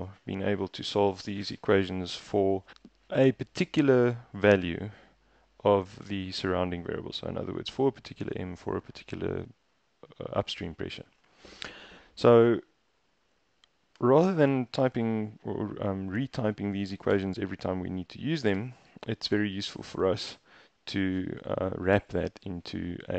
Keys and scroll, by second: 0.0 BackSpace, 0.9 Escape, 1.5-1.8 typing, 17.2 Up, 18.6 Return, 19.0 Up.